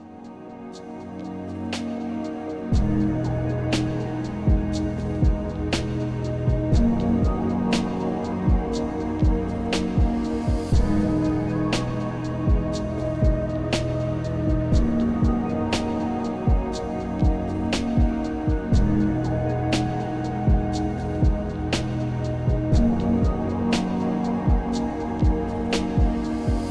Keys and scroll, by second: 14.7 ctrl+z, 21.6 ctrl+z.